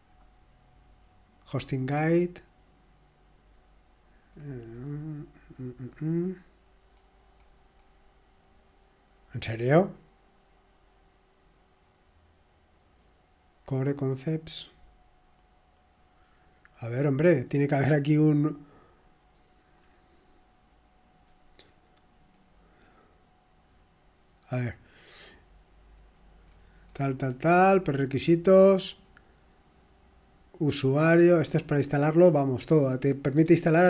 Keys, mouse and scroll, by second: 0.1 click, 0.1-0.9 typing, 3.6 typing, 4.7-5.8 scroll down 1, 5.8-6.3 scroll down 1, 6.9-7.3 scroll down 1, 7.1-7.8 typing, 14.7 scroll down 2, 16.3 click, 18.0 click, 20.1 click, 22.3-22.8 scroll down 1, 23.2-23.9 scroll down 1, 24.3 click, 26.4-27.9 scroll down 2, 27.9-28.6 scroll down 1, 28.6-30.2 scroll down 1, 30.2-30.5 scroll down 1, 30.8-31.4 scroll down 1, 32.5 click, 33.6-33.8 scroll down 1.